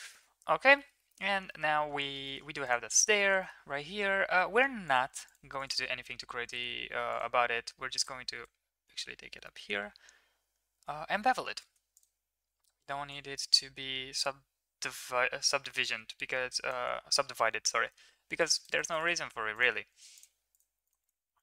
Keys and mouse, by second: 0.7 shift+middle click, 1.0 middle click, 1.4 shift+middle click, 2.2 shift+middle click, 3.3 shift+middle click, 5.5-7.1 drag, 8.0-8.4 drag, 9.4 shift+middle drag, 11.5 ctrl+a, 13.1-16.7 shift+drag, 18.3 click, 18.8 click, 20.1 click, 20.5 click, 20.8 click, 21.0 right click.